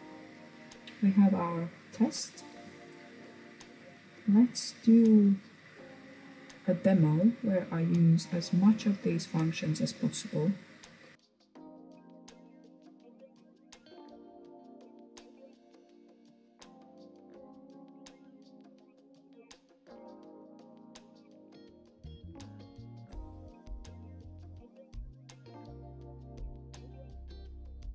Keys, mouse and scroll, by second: 11.2-11.8 shift+middle drag, 11.8 shift+a, 12.5 shift+middle click, 13.4 click, 14.8 g, 15.9 shift+a, 16.7 click, 17.1 Tab, 17.3 click, 18.8 ctrl+r, 19.4 scroll down 1, 19.5-21.4 shift+middle drag, 21.4 ctrl+r, 22.3 shift+middle click, 22.7 ctrl+r, 24.0 middle click, 24.4 ctrl+r, 25.4 ctrl+r, 26.0 middle click, 26.7 scroll up 3, 26.9 scroll down 1, 27.1 shift+middle click, 27.7 scroll down 1, 27.8 shift+middle click.